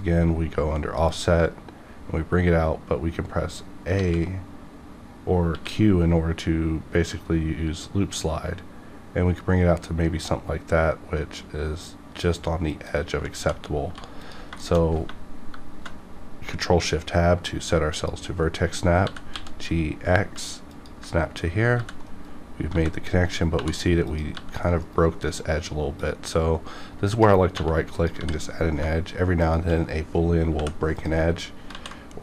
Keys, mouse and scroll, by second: 1.0 click, 5.5 q, 12.8 click, 13.3-13.8 typing, 14.2 click, 14.6 shift+middle click, 14.8 scroll up 1, 15.3 ctrl+shift+Tab, 17.9 ctrl+click, 19.0 ctrl+g, 19.5 ctrl+x, 20.7 ctrl+click, 21.8 g, 22.1 right click, 23.2 right click, 23.2 g, 23.3 right click, 23.5 2, 24.0 click, 24.3 g, 24.7 right click, 26.0-27.5 drag, 27.6 1, 27.9 click, 28.1 click, 28.1 g, 28.5 right click, 29.4 shift+click, 30.4 m, 30.9 click, 31.7 ctrl+z.